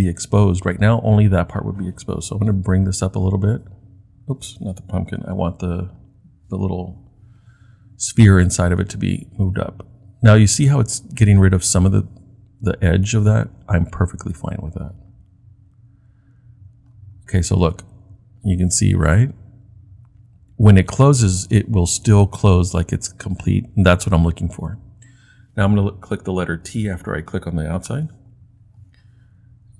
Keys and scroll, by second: 5.2 super+z, 27.9 t.